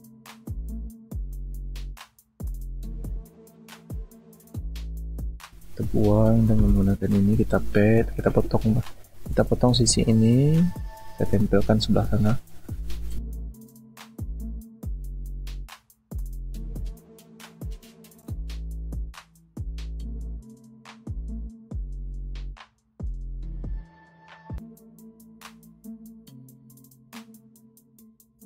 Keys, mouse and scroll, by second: 0.8 alt+scroll down 1, 15.5 alt+click, 19.0 alt+click, 23.2 ctrl+alt+z, 25.4 alt+click, 26.8-27.1 alt+scroll down 1.